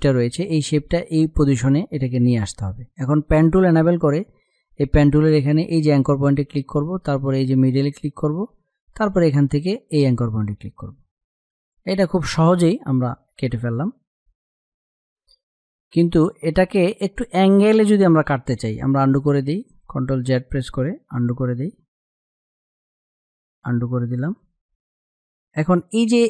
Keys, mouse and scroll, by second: 3.4 click, 6.8 click, 20.6 ctrl+Num_Lock, 20.7 ctrl+z.